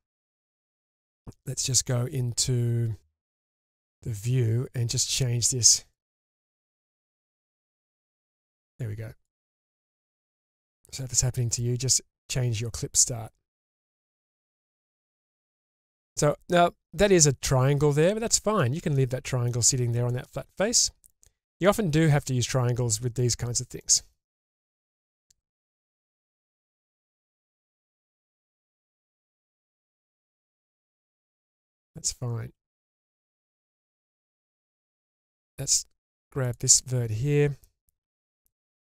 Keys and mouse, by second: 0.4 click, 3.3 click, 5.9-9.2 drag, 9.9-11.6 middle drag, 13.1 middle click, 13.9-14.5 shift+middle drag, 18.9-19.5 middle drag, 20.1 middle click, 23.8 middle click, 24.9 1, 26.6 click, 28.0 g, 28.1 g, 29.1 click, 30.2-31.1 middle drag, 31.7-32.8 middle drag, 33.1-34.4 shift+middle drag, 34.6-35.6 middle drag, 36.5-38.1 drag, 38.1 g.